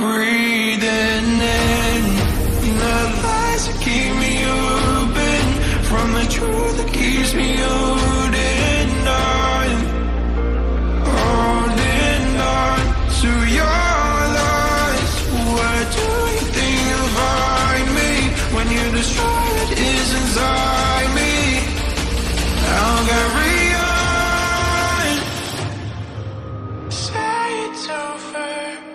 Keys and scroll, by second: 0.0-0.4 typing, 1.5 u, 2.1 u, 2.4 m, 3.2 space, 4.3-6.6 typing, 8.0-20.3 typing, 27.3 n, 27.5 ctrl+j.